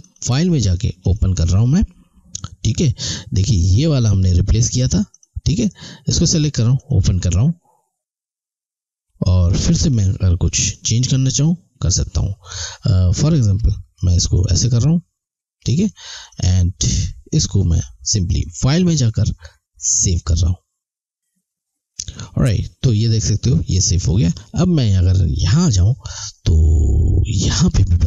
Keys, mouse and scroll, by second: 5.1 click, 10.5 click, 14.0 click, 18.5 click, 25.5 click.